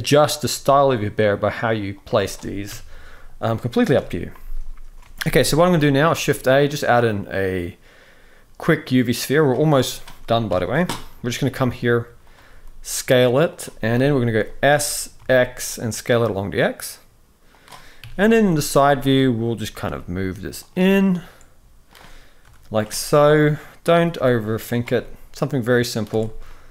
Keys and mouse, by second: 0.2 g, 2.4 KP_3, 3.7 KP_1, 4.9 alt+a, 5.3 shift+middle drag, 5.8 shift+a, 10.2 KP_3, 11.1 g, 12.2 s, 13.6 KP_1, 14.4 s, 17.7 KP_3, 18.6 f, 19.6 g, 20.7-21.6 middle drag, 22.1 KP_7, 22.9 shift+middle click, 23.6 g, 24.6-25.7 middle drag, 26.0 alt+a, 26.2-26.7 middle drag.